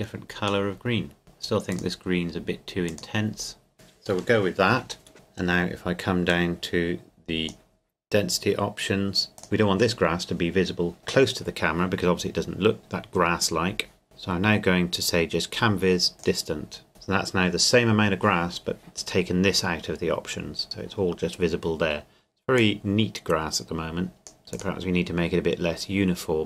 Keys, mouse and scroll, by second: 5.1 scroll down 1, 6.3 click, 16.2 click, 22.6-26.4 drag.